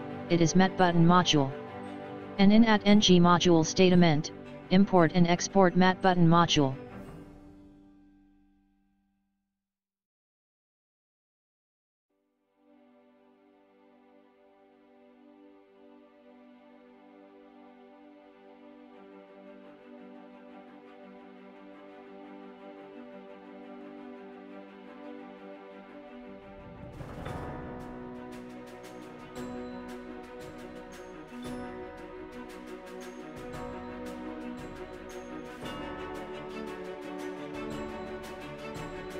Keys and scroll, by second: 2.9 Home, 4.3 Delete, 4.6 Up, 6.7 ctrl+x, 7.4 Down, 8.5 ctrl+v, 9.2 Up, 9.8 Down, 10.8 Down, 12.3 Up, 13.0 Right, 14.2 Left, 18.1 ctrl+c, 18.8 Down, 22.1 ctrl+v, 25.4 Down, 36.9 space.